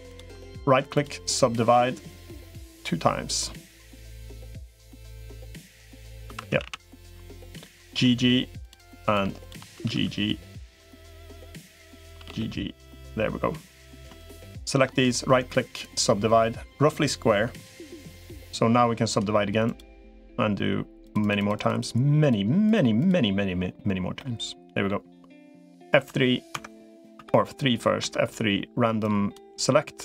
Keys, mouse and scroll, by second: 0.3 right click, 6.1 2, 6.3 a, 6.5 a, 7.1 shift+click, 7.5 g, 9.5 g, 14.3 click, 14.9-15.9 right drag, 18.9 right click, 20.9 click, 21.3 click, 22.1 click, 22.5 click, 24.0 middle click, 25.9 F3, 27.1 3, 27.9 F3.